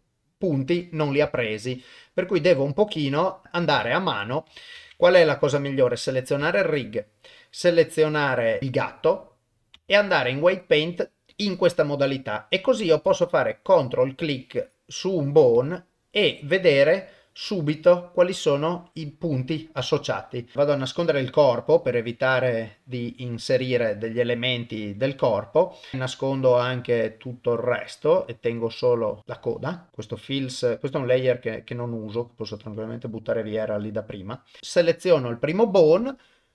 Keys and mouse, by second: 1.4 shift+middle click, 1.9 shift+middle click, 1.9 shift+middle click, 3.0 click, 3.8 shift+click, 4.9 ctrl+Tab, 6.8 shift+click, 9.7 ctrl+Tab, 13.4 ctrl+click, 20.2 ctrl+click, 21.8 click, 22.8 click, 25.9 click, 26.9 click, 28.8 click, 29.4 click, 31.2 click, 32.8 click, 34.6 middle click.